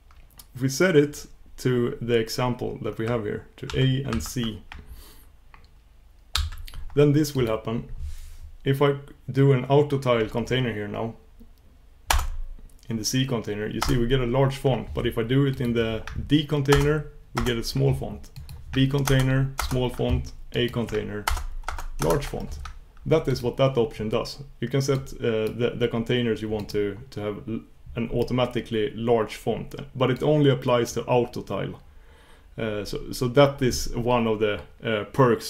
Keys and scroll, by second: 12.1 ctrl+super+Return, 13.8 ctrl+super+Return, 16.7 ctrl+super+Return, 16.9 ctrl+super+Return, 21.3 ctrl+super+Return, 22.0 ctrl+super+Return.